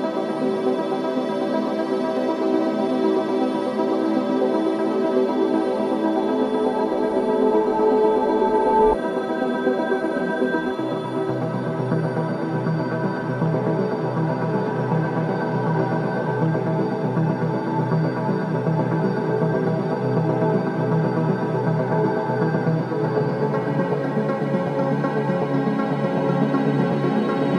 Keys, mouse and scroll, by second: 0.4-1.3 typing, 2.0 right click, 3.8-4.2 scroll down 1, 6.1 click, 7.3-7.7 scroll down 1, 8.4-8.8 scroll up 1, 12.1 scroll down 1, 12.9 scroll up 1, 13.4-13.9 scroll down 1, 14.6 scroll up 1, 15.3-16.0 scroll down 1, 19.5 scroll up 1, 24.2-24.6 scroll up 1, 24.6 scroll down 1, 25.1-25.5 scroll up 1, 25.5-27.4 scroll down 1.